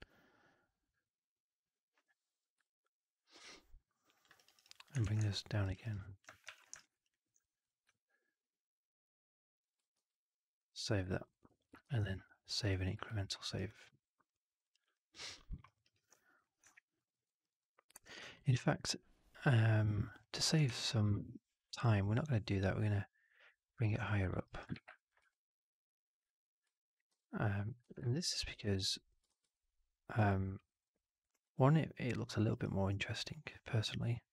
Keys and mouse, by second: 2.5-4.1 alt+drag, 4.3 alt+right click, 4.5 alt+right click, 4.6 alt+click, 4.9 shift+x, 5.2 alt+click, 5.6 alt+right click, 5.7 alt+right click, 5.9 alt+click, 6.4 4, 6.7 alt+right drag, 6.8 alt+right drag, 7.0 alt+drag, 7.6 drag, 7.9-9.5 alt+drag, 8.2 alt+4, 9.9 ctrl+s, 11.0 middle drag, 11.2 right drag, 11.4 drag, 11.7 ctrl+s, 13.0 alt+middle drag, 13.4 alt+right drag, 13.6-14.5 alt+drag, 14.6 right click, 14.7 alt+right drag, 15.0 alt+drag, 15.4 alt+middle drag, 15.6 alt+right drag, 15.7 alt+right drag, 16.3 drag, 16.6 alt+drag, 17.0 alt+middle drag, 17.2 alt+right drag, 17.5-17.9 alt+drag, 18.3 alt+right drag, 18.6-20.5 alt+drag, 20.6 3, 23.6 click, 24.0 alt+click, 24.4 alt+right click, 24.6 shift+x, 24.9 click, 27.0 shift+f, 27.7 w, 28.0 alt+right click, 28.1 alt+click, 28.4 4, 28.7 alt+right drag, 28.8 alt+drag, 29.2 shift+x, 29.5-30.1 alt+drag, 30.2 alt+middle drag, 30.4 alt+right drag, 30.6 alt+right drag, 30.8-32.1 alt+drag, 32.2 alt+middle drag, 32.4 alt+right drag, 32.8-34.3 alt+drag.